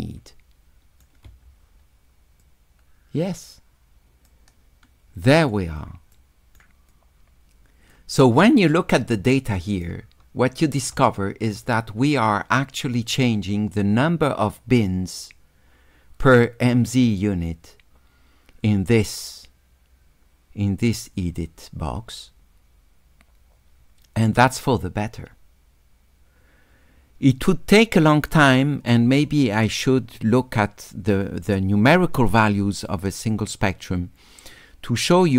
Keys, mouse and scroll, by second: 2.4 click, 4.3-5.5 drag, 6.2 right click, 6.9-7.9 drag, 9.5 shift+click.